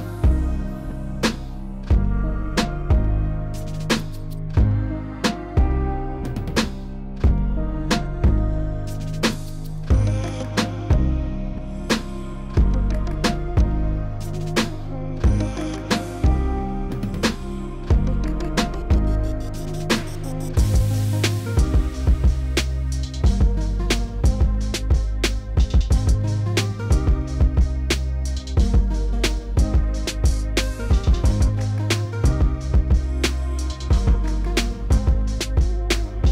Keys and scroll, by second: 2.1 s, 7.6 alt+a, 8.7 2, 9.6 2, 24.5 ctrl+z, 30.2 s, 30.9 4, 31.6 s, 32.1 4.